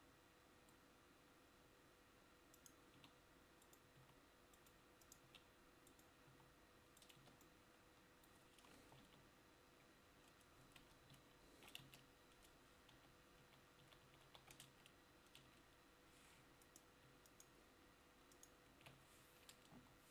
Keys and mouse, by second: 0.0 e, 7.3 Tab, 9.2 ctrl+z, 11.3 ctrl+shift+z, 12.0 Tab, 13.1-14.8 ctrl+z, 14.8 Tab, 19.9 Delete.